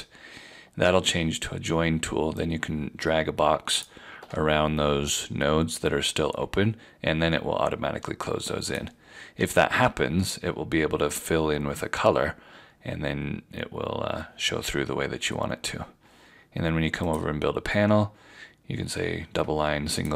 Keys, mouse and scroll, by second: 2.4 shift+click, 8.7 click, 9.4 Left, 9.4 v, 17.1 click.